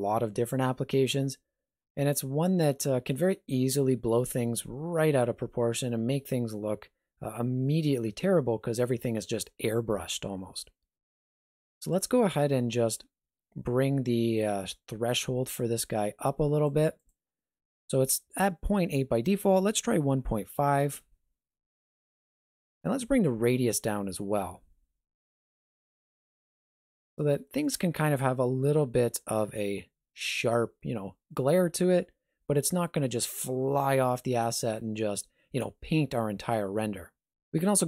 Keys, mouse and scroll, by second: 11.8 click, 14.5 click, 23.2 click.